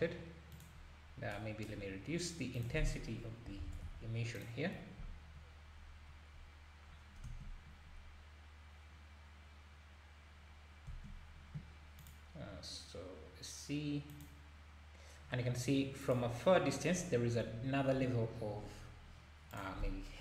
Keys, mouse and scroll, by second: 2.5-4.5 drag, 5.4 scroll up 1, 7.3 space, 10.9 space, 14.3 space, 19.7 space, 20.1-20.2 scroll down 3.